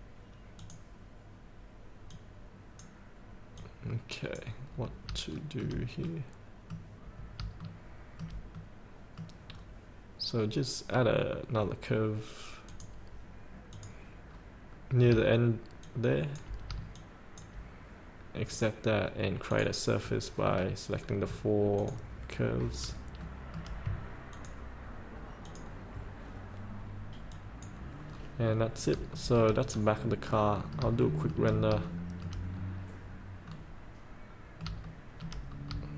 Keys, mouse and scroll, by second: 4.9 scroll up 1, 5.5 shift+middle click, 6.3 middle click, 7.2 scroll up 1, 7.8 shift+middle click, 8.8 middle click, 9.7 scroll down 1, 12.8 click, 14.6 scroll down 1, 17.2 shift+click, 18.7 click, 20.7 scroll down 1, 22.0 ctrl+click, 22.5 scroll up 1, 23.4 shift+middle click, 24.5 ctrl+click, 25.6 ctrl+click, 27.5 click, 28.3 scroll up 1, 29.2 shift+scroll up 1, 29.9 scroll up 1, 30.4 middle click, 31.2 shift+middle click, 32.0 shift+middle click, 32.7 scroll up 1, 33.7-34.9 middle drag, 35.1 shift+middle click, 35.7 scroll down 1.